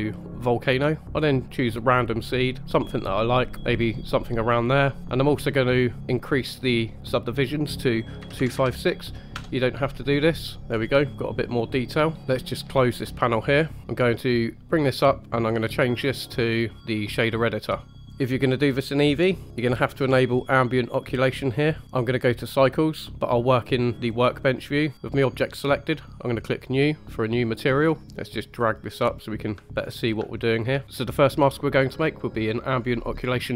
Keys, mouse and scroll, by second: 0.4 drag, 1.5 click, 2.6-3.2 middle drag, 6.6-10.6 drag, 10.6 middle click, 10.6 scroll up 2, 11.0-11.8 middle drag, 13.1 click, 13.8 shift+middle click, 13.8 scroll down 2, 14.2 click, 14.7 click, 17.2 click, 18.0-19.0 drag, 21.8-23.1 drag, 24.5 click, 24.9 click, 24.9 middle click, 26.5 click, 27.4 middle click, 28.0 n, 28.3-29.5 drag, 29.6 shift+middle click, 29.7-30.1 scroll up 2, 30.3 shift+click, 30.5 shift+middle click.